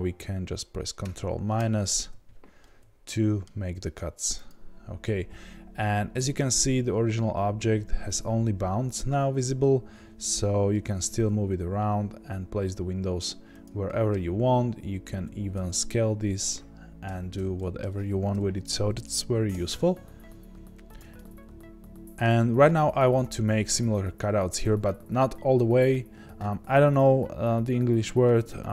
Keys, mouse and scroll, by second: 1.5 ctrl+KP_Subtract, 2.6-28.7 middle drag, 4.4 click, 10.7 g, 15.2 s, 18.3 KP_1, 19.5 g, 20.9 click.